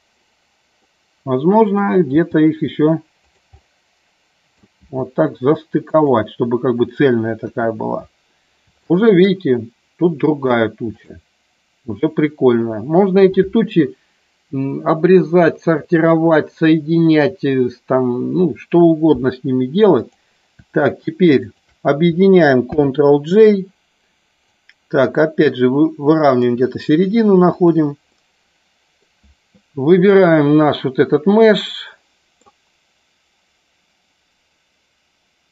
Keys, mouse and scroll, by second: 0.8 middle click, 2.1 g, 3.2 click, 3.5 middle click, 4.7 g, 5.8 click, 7.4 KP_1, 8.9 shift+middle click, 11.0 click, 20.0 click, 21.4 shift+click, 22.7 ctrl+j, 24.4-26.4 drag, 27.5 click, 28.1 middle click, 31.6 middle click.